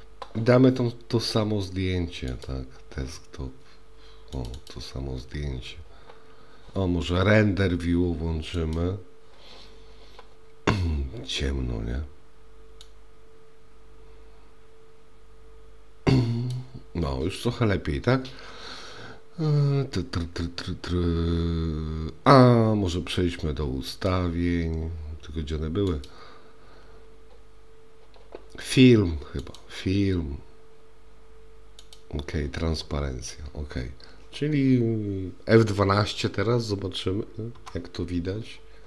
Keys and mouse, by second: 8.9 click, 13.0-16.6 drag, 24.0 click, 25.9 click, 29.5 click, 31.9 click.